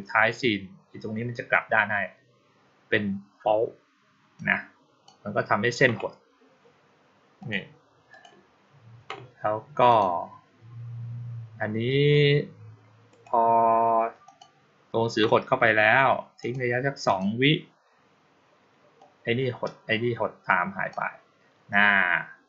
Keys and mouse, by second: 4.2-4.9 drag, 7.3 click, 8.0 click, 9.7 click, 13.0 right click, 14.1 click, 16.3 click, 16.9 click, 18.8-20.8 drag.